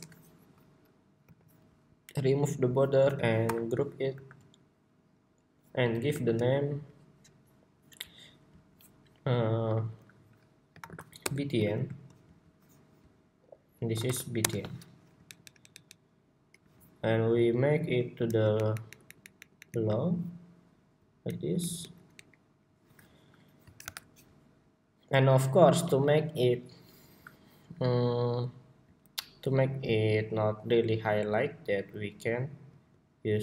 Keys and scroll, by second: 3.1 super+y, 4.4 super+g, 5.8 super+r, 11.4 super+g, 21.3 alt+Up, 22.3 alt+Up, 23.5 super+=.